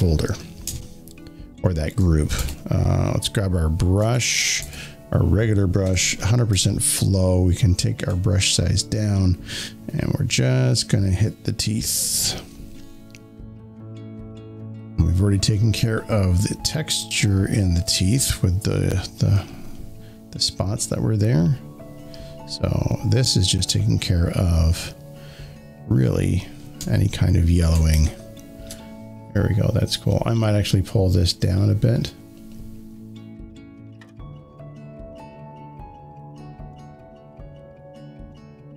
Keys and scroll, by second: 2.3 b, 5.7 shift+0, 26.7 z, 26.9 z, 27.8 space.